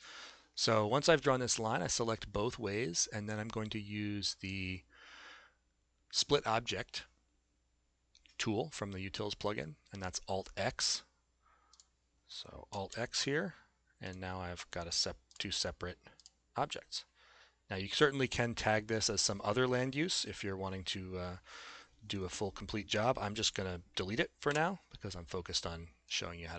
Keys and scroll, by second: 12.9 alt+x, 24.5 Delete.